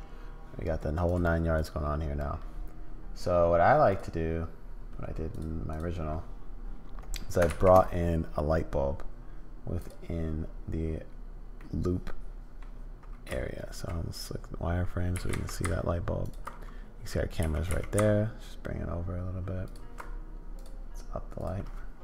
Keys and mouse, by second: 3.9 click, 5.7 click, 7.5 shift+a, 11.6 middle click, 13.3 z, 15.1 g, 17.4 g, 21.4-22.0 drag.